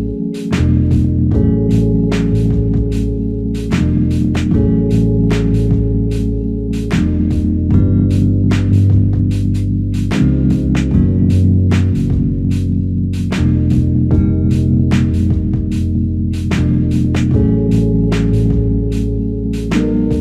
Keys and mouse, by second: 1.6 double click, 2.7 alt+click, 4.2 double click, 4.7 alt+click, 6.2 alt+click, 7.5 double click, 10.4 alt+click, 13.4 alt+m, 14.9 alt+click, 16.4 double click, 18.0 double click, 18.2 shift+click, 18.5 shift+double click, 19.0 alt+click.